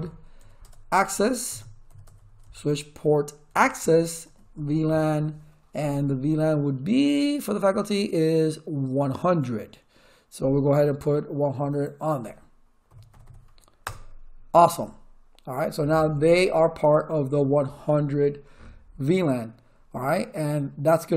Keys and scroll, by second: 0.4 a, 0.6 Tab, 1.4 Return, 1.6-4.2 typing, 3.8 Tab, 4.5 Tab, 12.6-13.6 typing, 13.8 Return.